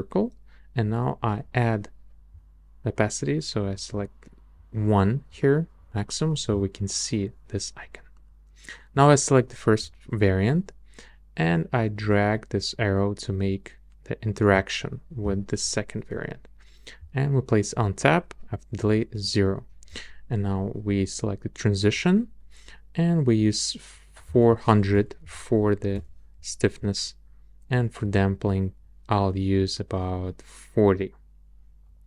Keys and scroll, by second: 24.9 BackSpace, 25.2 4, 25.9 Return.